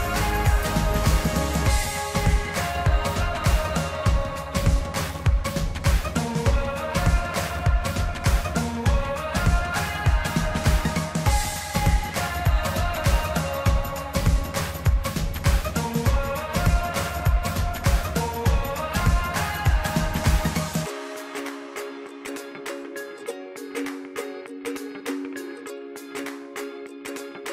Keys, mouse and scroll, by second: 2.0 KP_1, 2.7 KP_7, 3.6 click, 7.1-8.1 middle drag, 8.1-8.5 scroll up 1, 8.5-9.4 middle drag, 9.4 scroll down 2, 10.0-11.1 middle drag, 11.1 scroll down 1, 11.2-12.1 scroll up 10, 12.4-13.4 middle drag, 13.7-14.9 middle drag, 14.9-16.5 drag, 21.1 click, 23.5 middle click, 24.4 click, 24.6-25.8 middle drag.